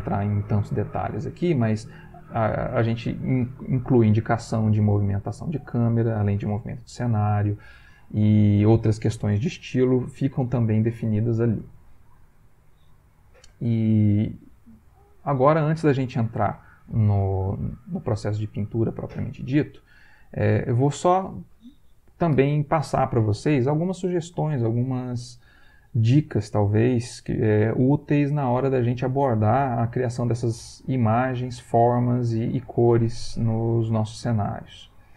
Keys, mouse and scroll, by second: 20.6 click.